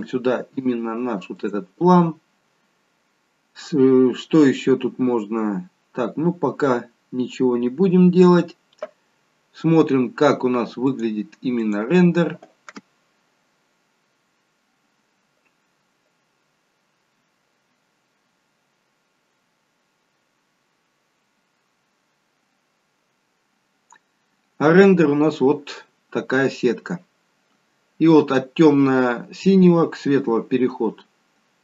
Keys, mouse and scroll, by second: 0.0 click, 5.4-6.1 scroll down 1, 6.1-6.5 scroll down 1, 6.5-8.6 scroll up 4, 10.8 click.